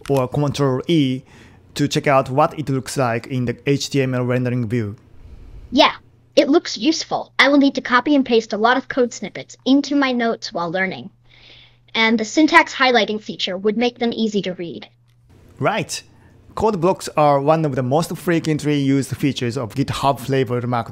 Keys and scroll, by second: 0.1 super+e.